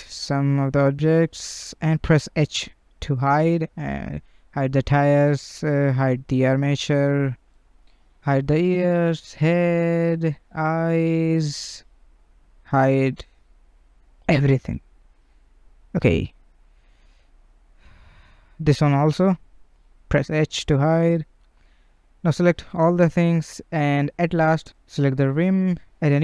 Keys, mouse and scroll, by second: 0.4 shift+click, 1.1 shift+click, 1.9 h, 2.6 click, 3.7 h, 4.5-5.3 middle drag, 5.3 click, 5.5 h, 6.1 scroll down 1, 6.2-7.1 shift+middle drag, 7.1 click, 7.6 shift+click, 8.1 shift+click, 8.6 shift+click, 9.3 shift+click, 10.0-11.1 middle drag, 11.1 scroll up 1, 11.5 shift+click, 11.9 shift+click, 13.1 h, 13.5 click, 14.1 shift+click, 15.2 h, 15.5-15.8 scroll down 2, 15.8-17.7 middle drag, 17.7 click, 18.1 shift+click, 18.4-20.3 middle drag, 20.3 scroll down 1, 20.5 middle click, 20.8 h, 21.2-22.1 scroll down 1, 22.1 a, 23.5 click, 23.6 ctrl+z, 24.6 shift+click, 25.8-26.2 drag.